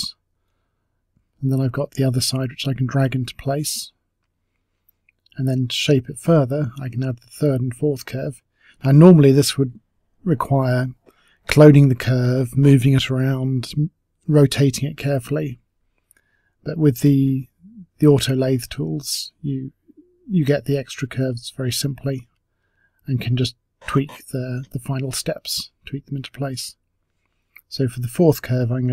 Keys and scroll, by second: 0.2 t, 0.5 r, 1.1 w, 2.9 e, 11.5 space, 12.3 w, 13.9 space, 18.8 t, 19.2 e, 21.3 w.